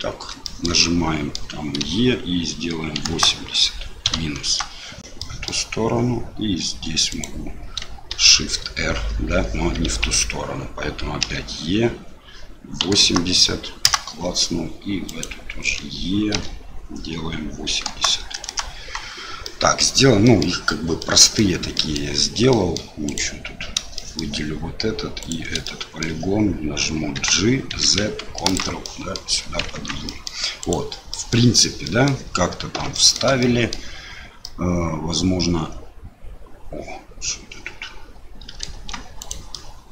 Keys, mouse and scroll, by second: 0.4 shift+middle click, 0.8 middle click, 1.8 e, 5.3 middle click, 7.1 click, 8.1 shift+r, 10.0 ctrl+z, 11.2 e, 15.0 click, 16.3 e, 19.5 middle click, 20.4 middle click, 21.1 middle click, 21.9 middle click, 22.6 middle click, 23.0 click, 23.9 shift+middle click, 25.2 shift+click, 25.6 middle click, 27.1 g, 29.0 middle click, 29.7 Tab, 30.0 middle click, 30.6 click, 31.1 middle click, 31.8 middle click, 32.9 shift+middle click, 33.4 middle click, 34.4-38.6 middle drag, 38.7 Tab, 39.2 click, 39.5 middle click.